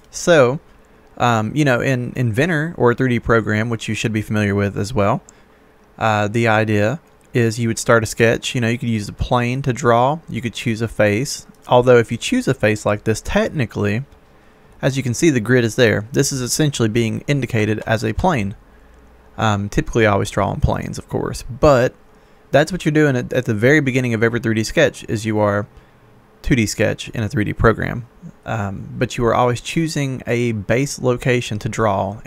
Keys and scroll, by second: 17.7 ctrl+z.